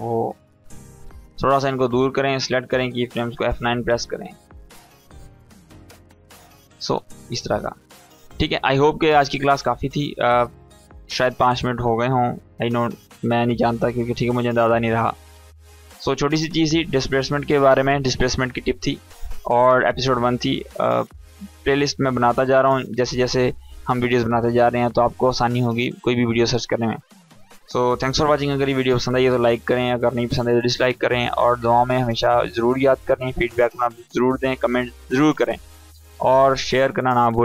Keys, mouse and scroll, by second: 3.0 F9, 3.4 click, 4.0 space, 5.7-6.4 click, 6.2 space, 7.4-8.3 click.